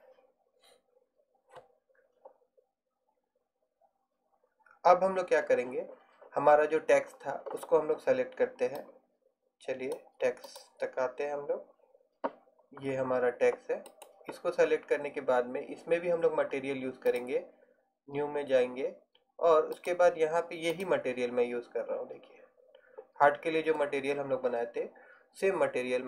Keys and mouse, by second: 10.1-11.4 drag, 12.6 click, 14.0-19.1 drag, 19.9-22.9 drag.